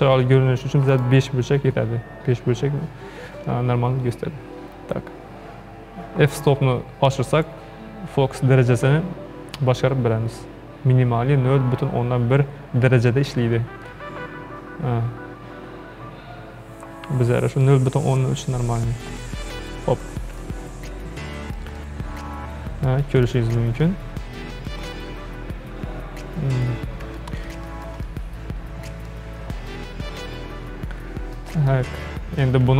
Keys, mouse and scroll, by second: 0.9-4.0 drag, 7.3-10.4 drag, 20.5-23.5 shift+middle drag, 23.5-23.9 scroll down 4, 23.9-26.9 shift+middle drag, 26.9-27.2 scroll up 1, 27.2-32.7 shift+middle drag.